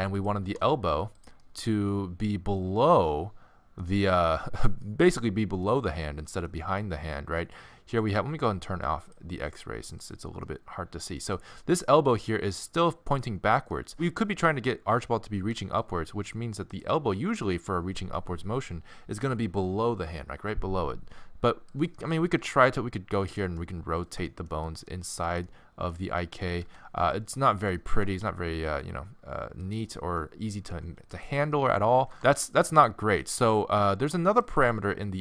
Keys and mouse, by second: 0.4 g, 4.3 middle click, 6.2 middle click, 7.6-9.0 middle drag, 9.0-10.5 drag, 10.5 middle click, 10.8 click, 10.9 middle click, 14.1 middle click, 15.6 g, 21.7 click, 22.4 r, 23.4 click, 24.1-25.5 middle drag, 25.5 click, 26.4 click, 26.6 r, 27.9 r, 30.1 middle click, 31.1 click, 31.6 middle click, 32.0 g, 32.1 z.